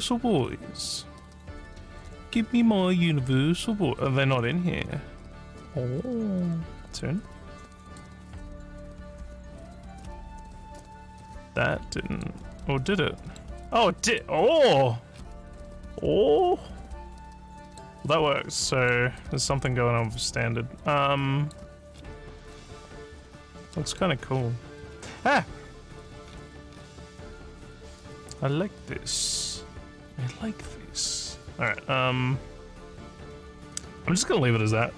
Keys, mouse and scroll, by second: 0.3 scroll up 1, 3.3-4.0 scroll up 3, 6.9 click, 7.9 click, 11.2-12.3 alt+drag, 12.6 alt+middle click, 13.7 alt+click, 14.5 alt+scroll down 4, 15.2 alt+scroll down 1, 15.6-17.8 alt+drag, 18.2 alt+middle click, 18.6 alt+middle click, 19.2-21.6 alt+drag, 22.0 scroll down 3, 22.0-23.2 scroll up 9, 23.7 alt+middle click, 24.4 alt+scroll up 4, 24.9 alt+scroll down 2, 25.4-26.0 alt+scroll down 8, 25.9 alt+scroll up 1, 26.0 alt+scroll down 1, 26.3-26.9 alt+scroll down 2, 27.2 alt+scroll down 1, 27.7-31.6 alt+middle drag.